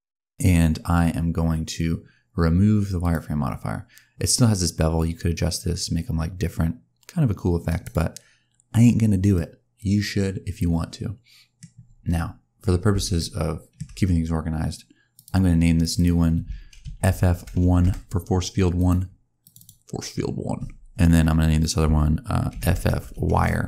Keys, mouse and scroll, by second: 2.9 click, 4.9 click, 9.2 middle click, 13.0 shift+middle click, 13.9-15.0 scroll down 1, 15.0 click, 15.7 click, 15.8 click, 16.9 shift+f, 18.6 click, 19.3 click, 19.4 click, 22.5 shift+f.